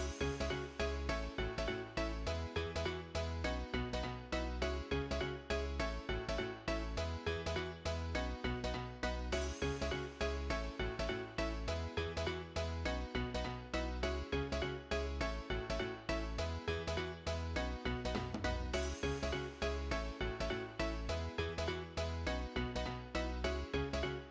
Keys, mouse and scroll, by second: 9.9 shift+click.